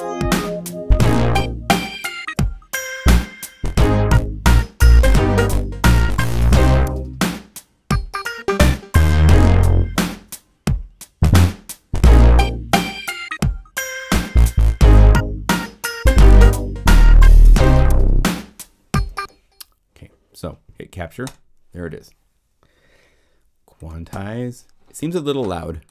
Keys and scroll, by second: 18.9 0, 24.1 p.